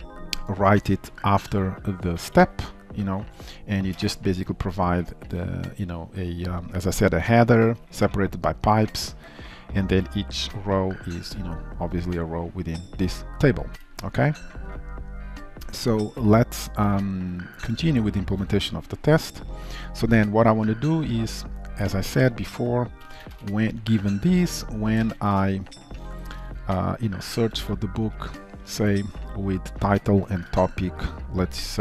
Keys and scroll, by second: 30.4 Return.